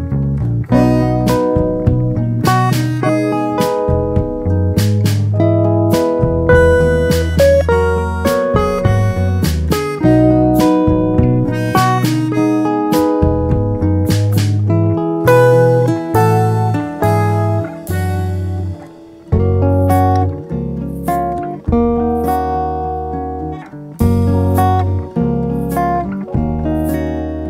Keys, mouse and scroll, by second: 0.0 click, 0.5 KP_1, 1.8-4.1 alt+s, 4.0 alt+click, 10.7 Tab, 11.0-12.3 drag, 12.9 ctrl+3, 14.0 click, 15.1 click, 17.2 click, 19.5 click, 20.1 click, 20.7 click, 23.7 Tab, 25.3 click, 26.0 click.